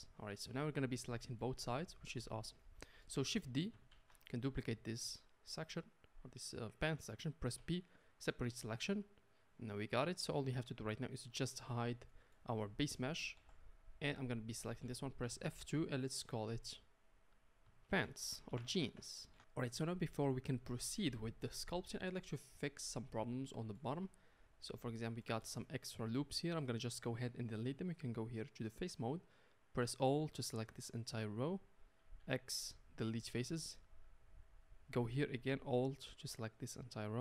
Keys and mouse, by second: 1.7 z, 4.0 shift+d, 7.6 p, 8.7 Tab, 11.3 click, 13.4 h, 13.8 click, 15.3 F2, 18.6 BackSpace, 18.8 BackSpace, 22.2-29.5 middle drag, 24.0 Tab, 29.5 click, 30.5-35.9 alt+middle drag, 32.2 x, 35.9 alt+click, 36.0-37.2 middle drag.